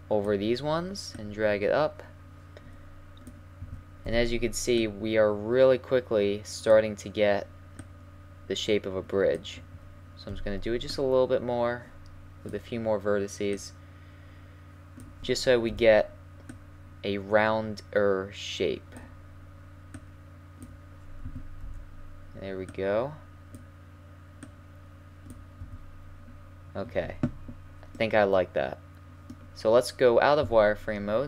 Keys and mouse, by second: 1.2-3.1 drag, 3.6 a, 4.1 b, 7.8-9.6 drag, 9.6 a, 10.3 b, 13.5-15.2 drag, 15.2 a, 15.7 b, 19.9-21.6 drag, 21.2 a, 21.6 b, 24.4-27.9 drag, 25.6 a, 30.4 z.